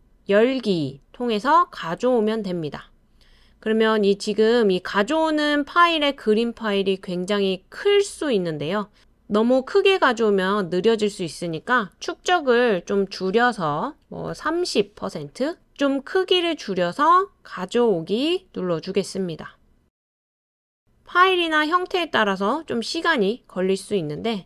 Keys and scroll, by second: 12.3-15.0 typing.